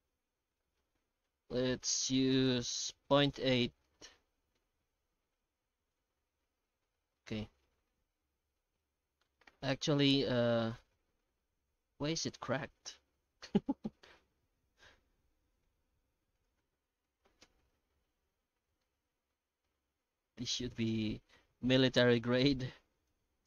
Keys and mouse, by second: 3.8-7.0 middle drag, 7.2 shift+middle click, 9.7 middle click, 11.4-14.9 middle drag, 15.5 middle click, 16.5-18.1 drag, 18.8-19.3 middle drag, 19.6 middle drag, 20.4-22.2 middle drag, 23.1-23.4 drag.